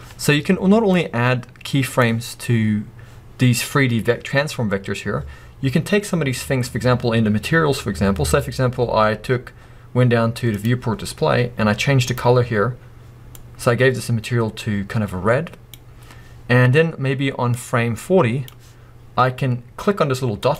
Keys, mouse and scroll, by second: 0.9-12.6 drag, 2.3 scroll up 1, 7.6-8.0 scroll down 1, 10.9-11.7 scroll down 1, 17.6-20.5 drag.